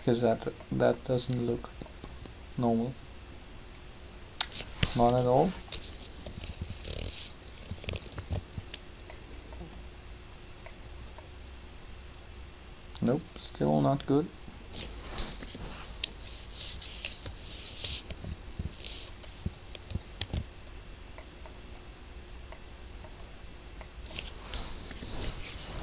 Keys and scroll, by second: 4.8 7, 8.1 alt+a, 15.3 7, 18.0 shift+r, 20.2 alt+a, 24.7 7.